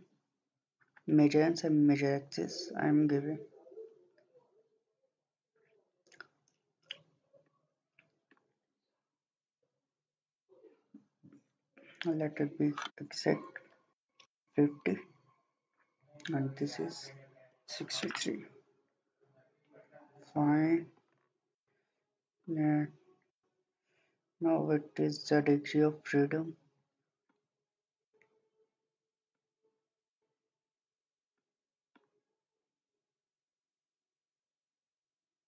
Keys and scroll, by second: 13.5-14.5 typing, 17.3-18.0 typing.